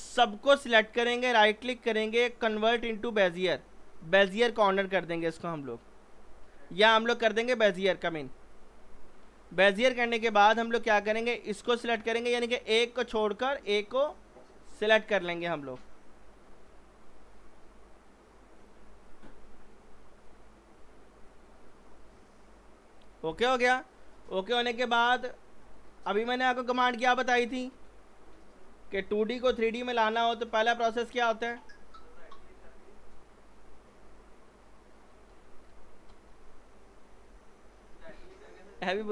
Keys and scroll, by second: 29.5 p.